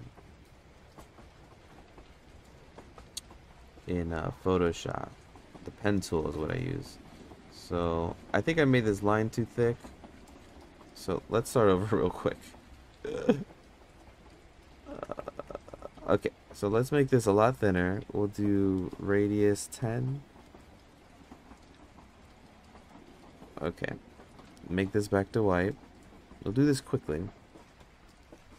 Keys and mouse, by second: 12.7 Escape, 12.9 Escape, 14.1 Tab, 14.5 Tab, 14.9 ctrl+z, 15.2 ctrl+z, 15.5 ctrl+z, 17.7 click, 18.5-21.2 drag, 22.0-23.4 shift+drag, 24.6 click.